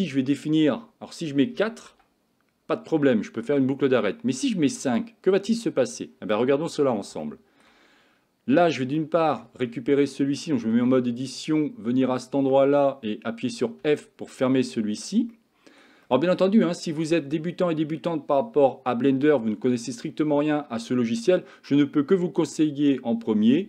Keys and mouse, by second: 0.4-1.9 drag, 4.9 click, 6.7 Tab, 7.3 shift+middle click, 8.6 Tab, 9.0-9.4 shift+middle drag, 10.8 Tab, 13.9 f, 14.4 middle click, 15.4 shift+middle click, 16.1 shift+middle click, 16.7 middle click.